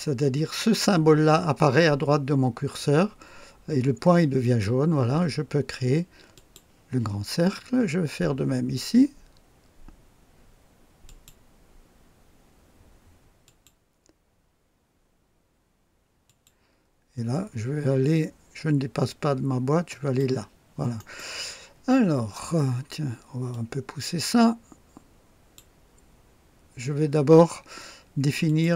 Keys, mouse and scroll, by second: 4.4 click, 6.3 click, 11.0 click, 13.4 click, 16.2 click, 19.9 click, 20.9 right click, 23.5 click, 28.4 click.